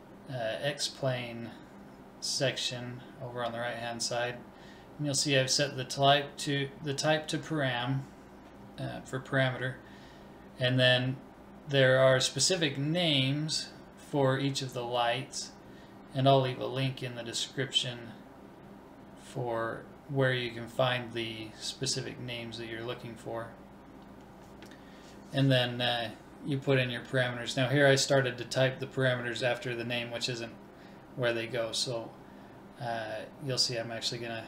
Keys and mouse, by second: 0.4-3.7 drag, 5.0-7.0 drag.